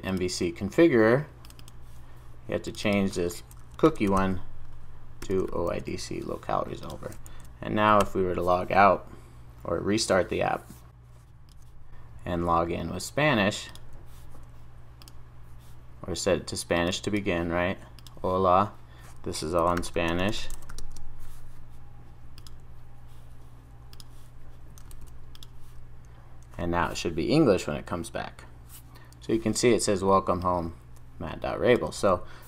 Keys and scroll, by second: 5.2 Return, 6.3 super+s.